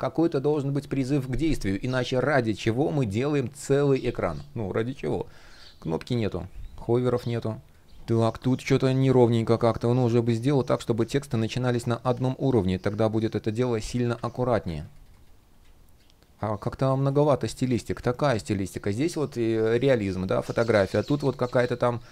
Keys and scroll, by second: 9.3 shift+p, 21.0 shift+p.